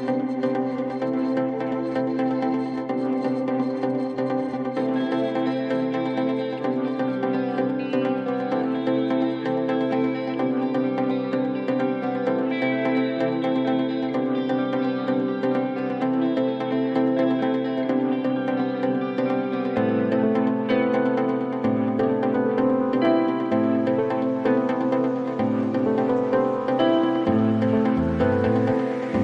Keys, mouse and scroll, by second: 0.0 click, 3.3 click, 4.7 click, 9.8 click, 11.4 click, 13.3 a, 18.5 click, 21.4 click, 22.3 click, 24.2 click, 25.9 click, 27.3 click.